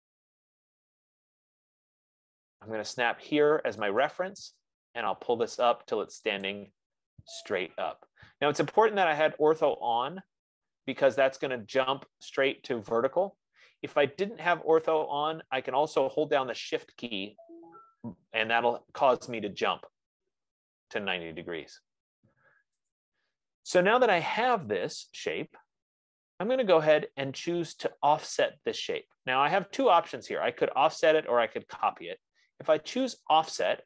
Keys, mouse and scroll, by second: 0.1 click, 4.6 click, 6.8 click, 21.3-22.1 scroll, 23.3 click, 25.3 click.